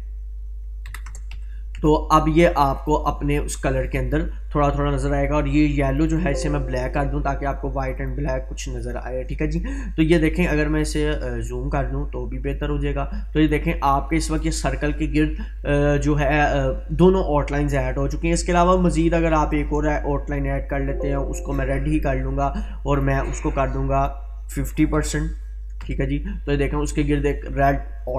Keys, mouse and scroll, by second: 2.8-4.3 drag, 19.5-22.2 drag.